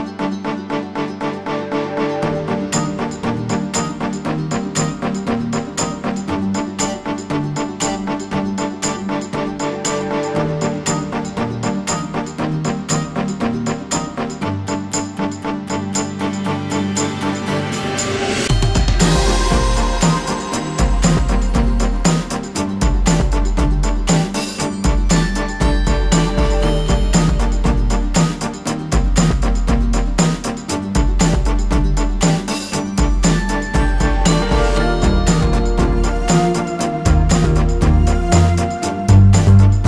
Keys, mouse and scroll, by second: 4.8 alt+scroll up 1, 5.6 alt+scroll down 1, 7.7-16.7 alt+drag, 13.1 typing, 16.8 space, 18.3-25.4 drag, 25.4 alt+scroll down 1, 26.1-26.6 alt+scroll up 1, 27.1 space, 27.6 ctrl+d, 32.3-39.8 drag.